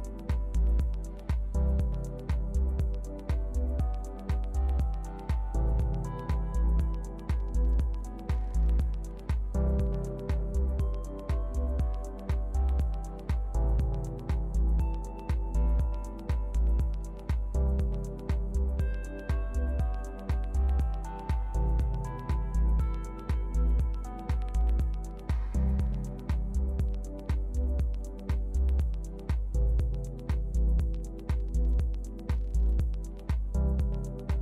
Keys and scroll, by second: 5.0 alt+u.